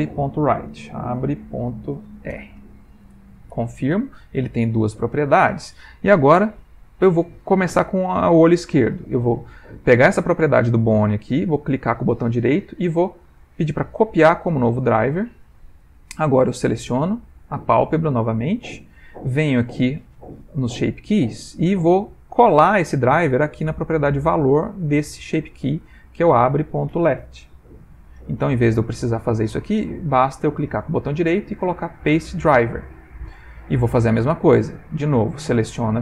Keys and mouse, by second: 5.8 middle click, 11.6 right click, 16.7 middle click, 17.9 click, 19.6 click, 21.3 click, 26.1 click, 28.0 click, 30.7 right click, 32.9 middle click, 34.5 click.